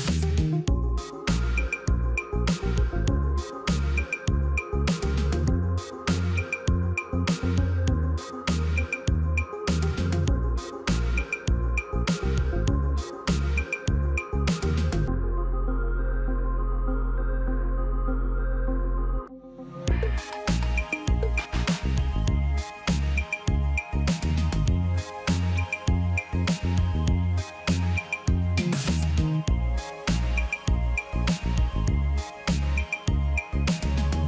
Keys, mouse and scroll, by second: 1.8 Left, 2.0 Up, 2.3 Up, 2.5 Up, 4.3 Down, 5.6 Right, 6.6 Up, 11.1 right click, 27.3-29.2 scroll down 1.